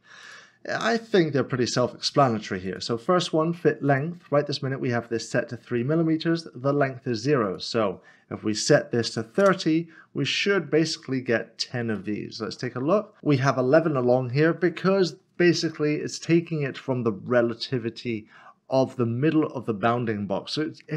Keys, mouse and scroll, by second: 0.2 click, 2.7 click, 5.0 click, 7.5 click, 9.1 typing, 9.4 Return, 10.6 scroll down 1, 11.3 middle click, 12.0 shift+middle click, 15.7 middle click, 19.8 middle click.